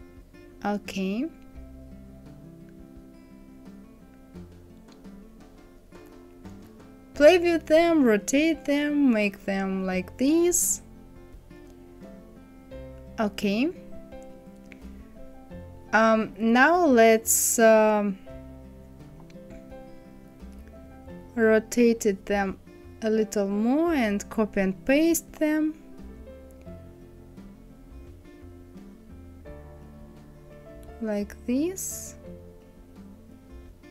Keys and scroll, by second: 8.9 Down, 9.1 Right, 9.3 Down, 11.8 KP_6, 12.0 Return.